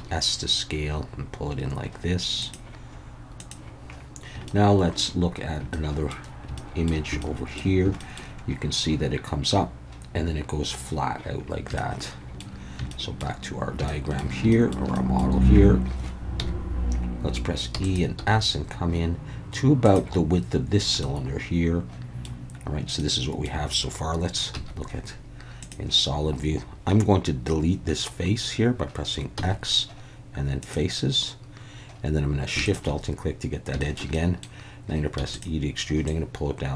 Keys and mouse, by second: 0.0 s, 2.4 click, 3.4 click, 4.6 shift+middle click, 5.7 shift+middle click, 6.6 shift+middle click, 7.2 shift+middle click, 8.1 shift+middle click, 11.8 shift+middle click, 12.9 shift+middle click, 13.9 shift+middle click, 14.5 shift+middle click, 15.0 middle click, 16.4 KP_1, 17.7 e, 17.8 click, 18.2 s, 19.8 click, 21.1-22.2 middle drag, 23.1 middle click, 24.5 z, 29.4 x, 33.8 shift+middle click, 34.1 middle click, 35.2 e, 35.3 click, 36.1-36.7 drag.